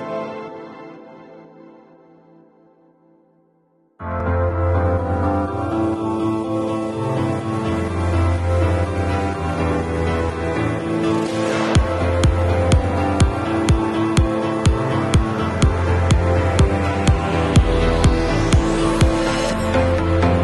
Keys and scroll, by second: 10.9 v.